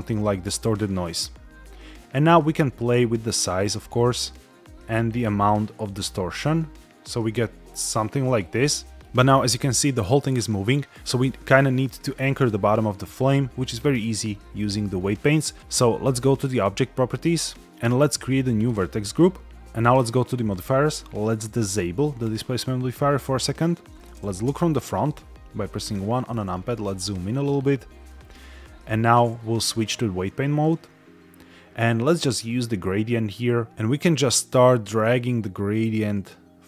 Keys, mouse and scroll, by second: 2.2-8.3 drag, 8.7 shift+middle click, 10.2 middle click, 16.4 click, 18.5 click, 20.4 click, 22.1 click, 24.4 KP_1, 25.6-26.0 shift+middle drag, 26.4-26.9 scroll up 5, 27.1-28.0 shift+middle drag, 28.3 scroll up 1, 29.6-30.6 drag, 32.3 click, 33.7 shift+middle click, 33.7 scroll up 3, 33.7 KP_1, 34.7-36.6 drag.